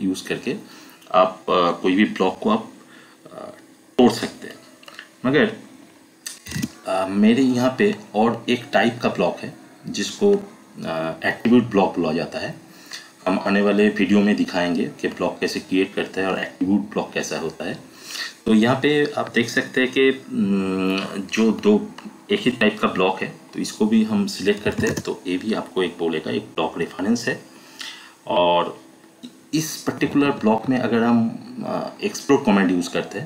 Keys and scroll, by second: 6.4 e, 6.5 space, 24.4-25.2 typing, 29.9 Escape.